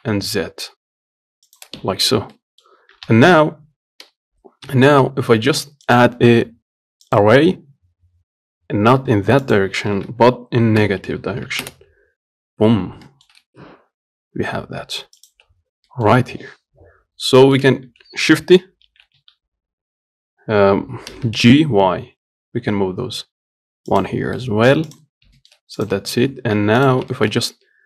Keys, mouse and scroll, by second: 2.0 Tab, 2.3 scroll down 3, 2.6 middle click, 3.3 KP_1, 7.4-8.9 drag, 9.7-12.5 drag, 13.3 shift+middle click, 13.7 s, 16.1-17.4 shift+middle drag, 17.4 scroll down 1, 17.7 shift+middle click, 18.0 scroll down 1, 19.1 shift+d, 24.6 middle click, 25.2 click, 25.4 scroll up 1, 25.6 shift+middle click, 26.0 click, 26.4 Tab, 26.8 Tab, 27.1 click, 27.4 shift+middle click, 27.7 scroll up 1.